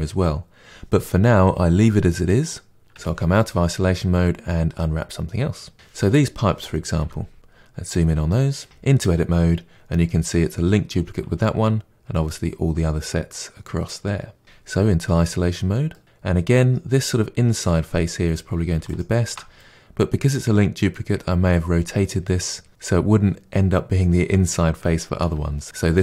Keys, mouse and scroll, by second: 2.9 KP_Divide, 4.0-5.7 middle drag, 5.7 click, 6.9 KP_Decimal, 8.6 Tab, 9.7-10.2 scroll down 3, 10.2-14.7 middle drag, 14.7 KP_Divide, 15.9-18.9 middle drag, 18.9 alt+click, 19.5-25.2 middle drag, 25.2 KP_Divide, 25.6-26.0 middle drag.